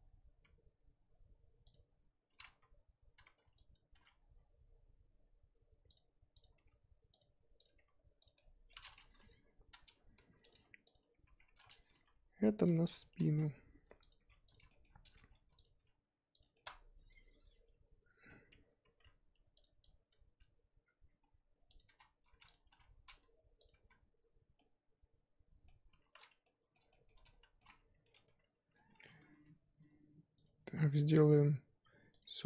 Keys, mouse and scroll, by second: 3.7 click, 3.9 g, 6.4 click, 6.5 g, 7.6 click, 7.7 g, 8.3 middle click, 9.1 KP_3, 10.5 Left, 10.9 Left, 11.2 Tab, 11.6-11.9 scroll down 3, 11.9 g, 12.7 shift+middle click, 12.9-13.2 scroll up 1, 13.2 s, 14.2 g, 14.7 shift+middle click, 15.1 g, 15.7 s, 16.5-17.4 shift+middle drag, 17.4-18.3 scroll up 3, 18.5 Tab, 18.7-19.6 scroll up 1, 19.6 z, 20.1 click, 20.2 s, 21.8 s, 22.6 g, 23.8 z, 24.5-26.3 middle drag, 26.3 scroll up 1, 26.4-28.7 middle drag, 28.7-29.3 scroll up 1, 29.3 3, 32.2 right drag.